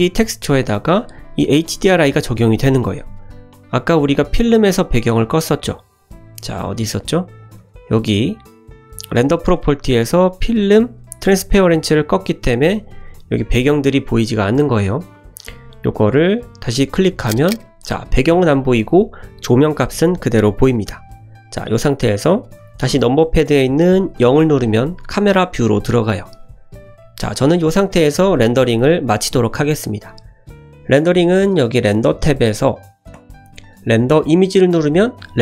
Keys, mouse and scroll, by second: 3.7 click, 4.1 click, 4.4 click, 6.7 click, 9.8-12.1 scroll down 2, 12.1 click, 13.1 KP_0, 13.4-15.2 middle drag, 16.6 click, 18.7 middle click, 24.1 KP_0, 33.1-35.4 drag.